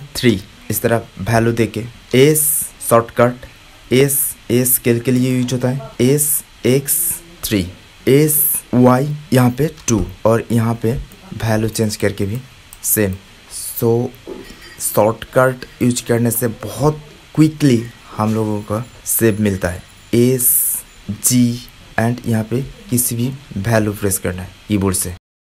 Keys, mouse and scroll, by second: 0.8-3.3 middle drag, 3.3 s, 5.9 s, 11.5-13.4 middle drag, 16.6-18.0 middle drag, 20.3 s.